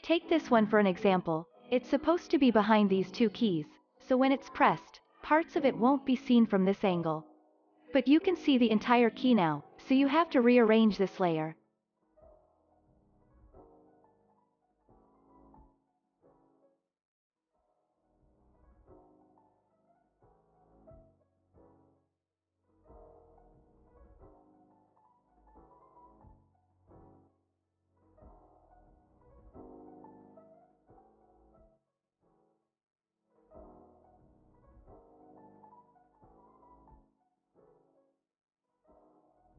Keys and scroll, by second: 19.8 z.